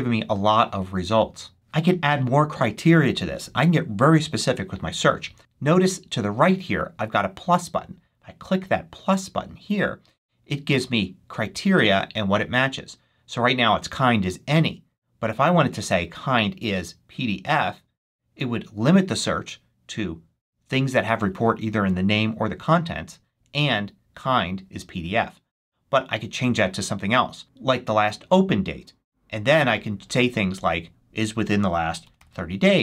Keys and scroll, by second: 31.7-32.8 typing.